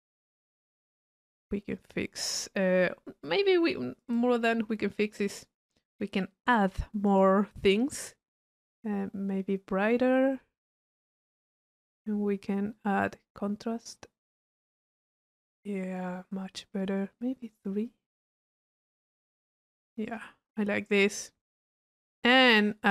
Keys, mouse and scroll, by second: 0.0 click, 1.1 middle click, 1.8 click, 9.0-12.2 middle drag, 13.1-14.2 middle drag, 17.4-18.9 drag, 20.1 click, 20.6 middle click, 21.1 click, 22.0-22.7 drag.